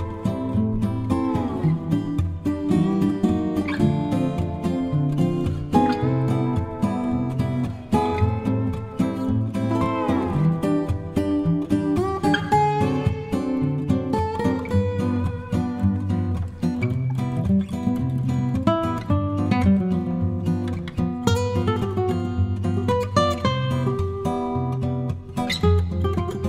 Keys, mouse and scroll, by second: 1.0-7.2 drag, 7.8 KP_Add, 8.8 KP_Add, 9.6 click, 10.7 click, 11.3 click, 13.3 click, 14.1 click, 14.7 click, 16.3 click, 17.6-20.3 drag, 21.0 KP_Add, 21.8 click, 24.4 click, 25.6 shift+click, 26.2 shift+click.